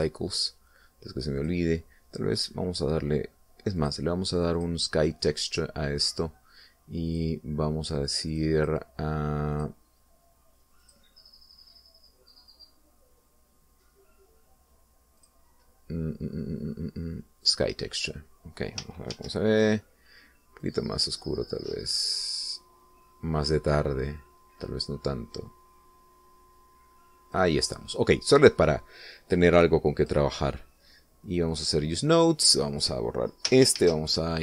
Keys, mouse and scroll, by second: 0.6 click, 1.2 click, 2.7 click, 3.6 click, 5.1 click, 5.9 click, 8.4 click, 9.6 click, 10.9 click, 12.1 click, 16.5 click, 18.8 click, 20.4 shift+z, 21.9-28.8 drag, 31.3 click, 32.8 click, 34.0 click.